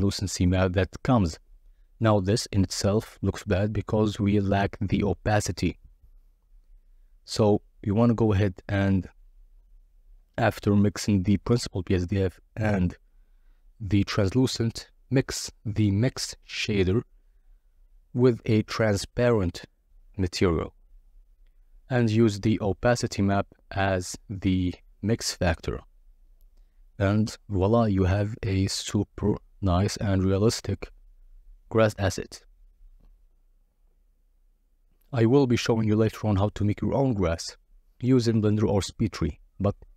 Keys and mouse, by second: 4.0 ctrl+shift+click, 4.8 click, 6.4-10.2 drag, 12.8 click, 16.3 click, 20.8 click, 25.3 ctrl+shift+click, 26.5 middle click, 28.1 ctrl+shift+click, 29.6 click, 30.7 KP_Divide, 32.3 KP_Divide, 33.3 z, 36.4-38.4 typing, 38.9 Return.